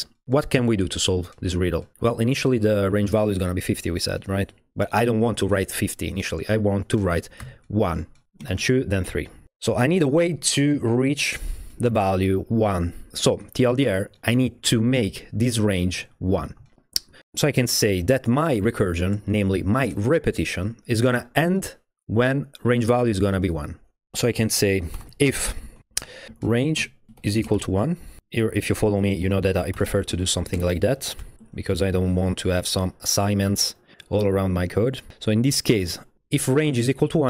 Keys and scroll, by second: 7.4-8.8 typing, 17.2 BackSpace, 24.7-31.9 typing, 32.0 Down, 32.3 Up.